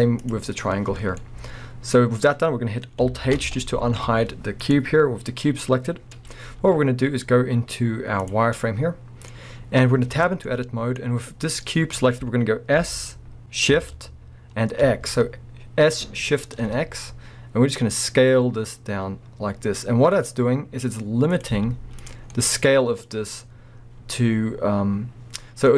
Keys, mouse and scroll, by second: 0.2 click, 1.0 scroll down 1, 1.2-4.6 middle drag, 2.0-3.4 scroll up 2, 3.4 alt+h, 3.8 alt+a, 4.6 click, 6.0 scroll down 1, 6.1-11.1 middle drag, 6.5 z, 9.4 scroll up 2, 10.1 Tab, 11.1-11.6 scroll down 2, 11.6 middle click, 12.0-12.8 scroll up 2, 12.8 s, 16.9-21.4 middle drag, 21.4 click, 21.5 z, 22.3 scroll, 22.3-25.7 middle drag, 23.4 scroll up 2, 25.4 scroll down 2.